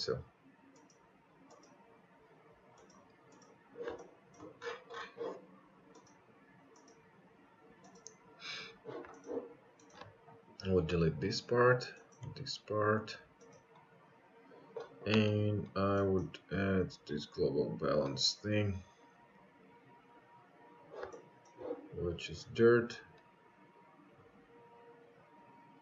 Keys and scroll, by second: 1.0 Delete.